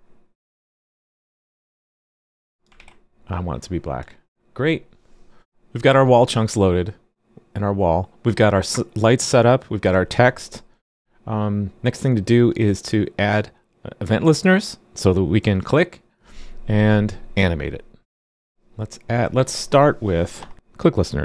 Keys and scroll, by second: 2.7 super+s.